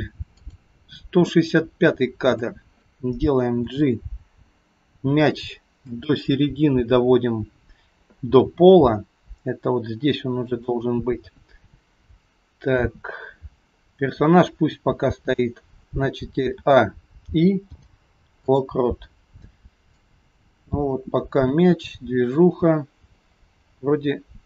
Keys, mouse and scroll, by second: 0.6 click, 2.4 click, 3.7 g, 6.6 KP_3, 8.3 g, 16.6 a, 17.7 i, 20.1 click.